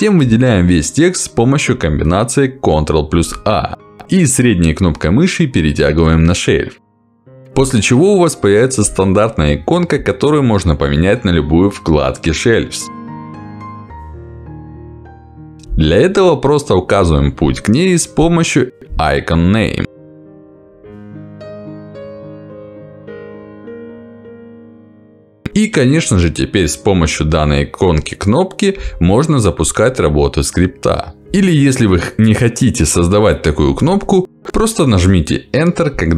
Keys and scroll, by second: 0.0 ctrl+v, 3.8 ctrl+a, 16.6 Escape, 22.1 Escape, 24.8 Escape.